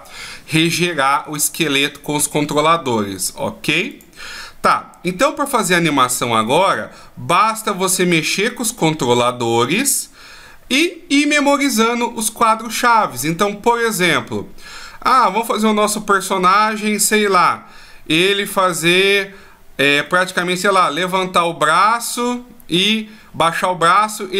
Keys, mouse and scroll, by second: 3.5 click, 4.2 middle click, 5.1 right click, 6.0 right click, 7.3 middle click, 12.5 middle click, 19.6 middle click, 23.9 middle click.